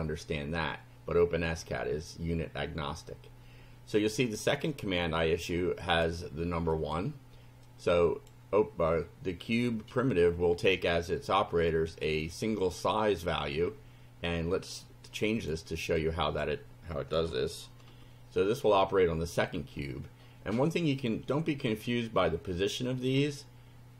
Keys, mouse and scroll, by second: 4.7-6.2 drag, 6.7 click, 7.7 click, 15.4 click, 16.0 click, 17.2 2, 17.9 F5.